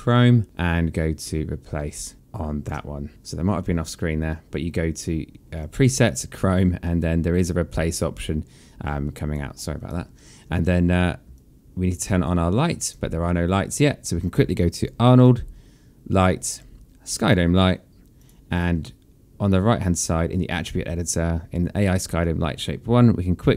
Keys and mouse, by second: 5.4 click, 9.6 click, 11.2 alt+click, 12.6 click, 14.4 click, 18.0 click.